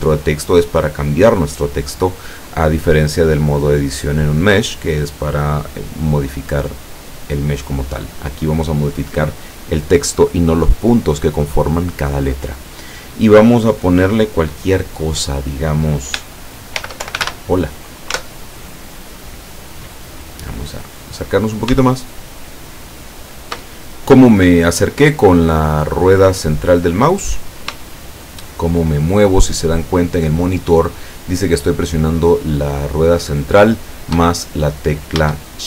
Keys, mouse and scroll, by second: 16.8 shift+h, 17.0 shift+o, 17.2 shift+l, 18.2 Tab, 20.7-21.5 scroll up 4, 22.3-23.7 shift+middle drag, 25.3-25.8 scroll down 4, 25.8-27.2 scroll up 2, 27.2 scroll down 2, 27.9-33.9 shift+middle drag.